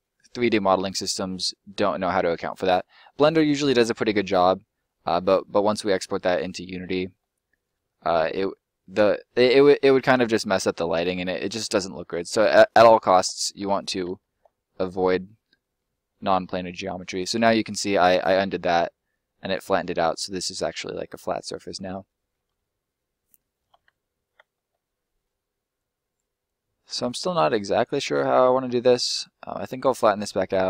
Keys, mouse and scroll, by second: 7.2 scroll down 1, 7.3 middle click, 7.8 scroll down 1, 8.0 middle click, 10.4 ctrl+middle click, 10.5 ctrl+z, 11.2 ctrl+z, 14.6 middle click, 18.4 middle click, 23.8 ctrl+z, 24.5 middle click, 25.7 click, 28.0 middle click, 29.0 click, 30.0 middle click.